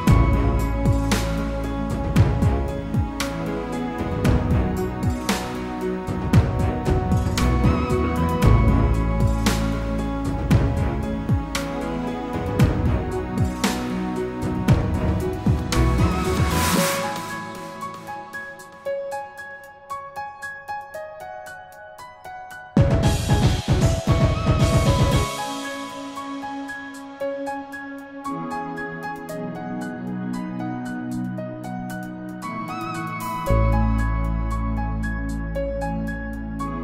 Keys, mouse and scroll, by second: 1.2 click, 2.7 click, 3.6 click, 5.3 click, 7.2 click, 8.7 click, 10.0 click, 15.0 alt+c, 16.2 click, 17.4 click, 18.9 click, 19.8 click, 20.7 1, 22.2 click, 23.0 1, 24.6 click, 28.9 click, 30.0 click, 31.0 click, 31.9 1, 32.2 0, 32.7 Return, 34.4 click.